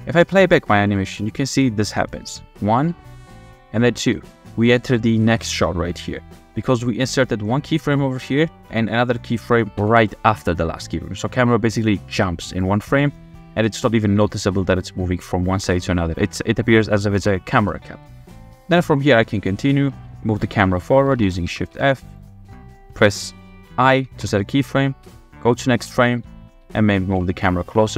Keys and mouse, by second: 0.5-1.0 drag, 1.5 click, 2.2 space, 4.0 space, 4.5 click, 5.1-6.7 drag, 9.8 Right, 11.7-14.5 drag, 16.4 click, 17.1 KP_0, 17.5 space, 18.5 space, 21.1 shift+f, 21.7 w, 22.1 click, 24.2 i, 25.0 Right, 25.7-27.9 typing.